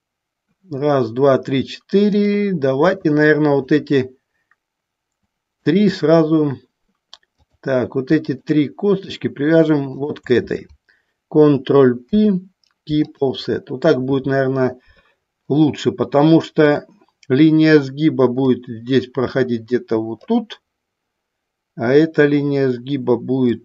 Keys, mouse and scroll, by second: 2.3 click, 3.8 shift+click, 5.7 shift+click, 9.0 shift+click, 10.2 shift+click, 12.3 ctrl+p, 16.9 click, 18.6-20.4 drag.